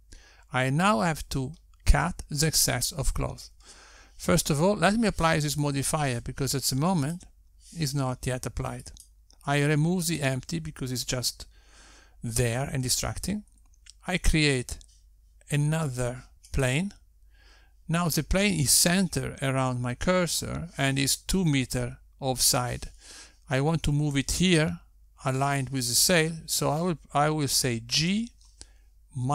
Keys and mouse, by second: 8.4 click, 9.3 click, 10.8 x, 15.4 shift+a, 29.2 g.